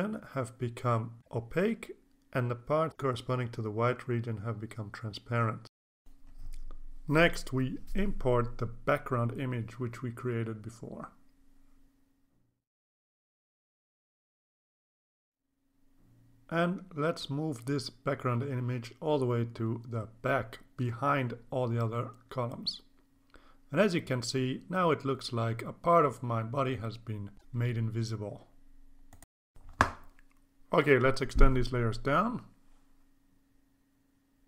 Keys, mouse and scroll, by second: 5.7 alt+Tab, 6.8 alt+Tab, 8.5-11.4 drag, 12.3 click, 13.8 click, 15.2 click, 18.7-21.1 drag, 24.6 click, 29.2-33.3 drag, 34.1 click.